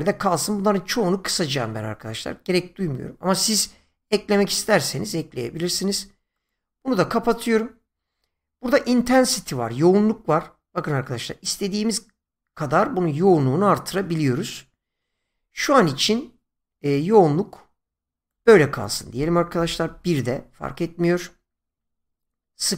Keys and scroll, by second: 19.6 1, 19.8 Return.